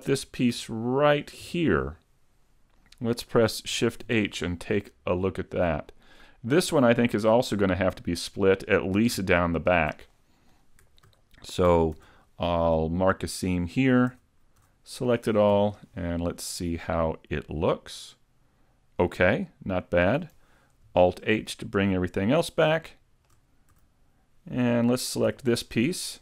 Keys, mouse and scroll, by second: 0.2 a, 0.6 a, 1.4 l, 2.6-3.8 scroll down 1, 3.8 scroll down 1, 4.1 shift+h, 4.6 middle click, 6.0 scroll down 1, 6.3 middle click, 8.0 scroll up 1, 9.6 alt+right click, 10.2 middle click, 12.0 ctrl+e, 14.2 a, 14.7 a, 15.6 u, 17.6 middle click, 20.9 alt+h, 21.4 middle click, 22.8 shift+middle click, 23.8 a, 25.3 l.